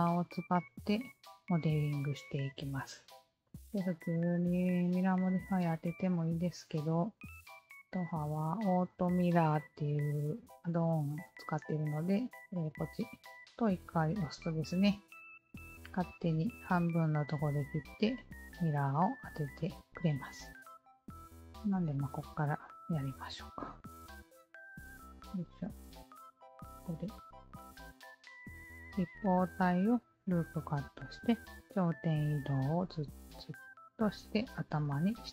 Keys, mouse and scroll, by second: 3.4 alt+click, 5.5 q, 6.0 alt+click, 7.9 alt+click, 12.6 alt+click, 15.6 Tab, 16.0-19.8 alt+drag, 20.6 q, 21.0 alt+middle click, 21.3-22.6 alt+drag, 25.3 click.